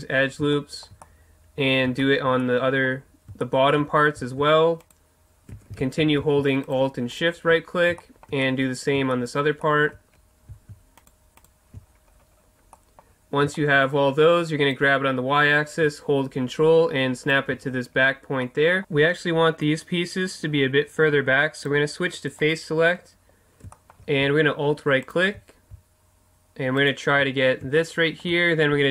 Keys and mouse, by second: 0.1-3.1 middle drag, 3.7-4.8 middle drag, 5.8 ctrl+z, 8.4 middle click, 9.9 middle click, 11.8 right click, 11.9 middle click, 12.5-16.3 middle drag, 14.7-16.6 drag, 17.7-18.8 middle drag, 21.6-23.7 drag, 22.4-25.0 middle drag, 27.5-28.9 middle drag, 27.8 right click.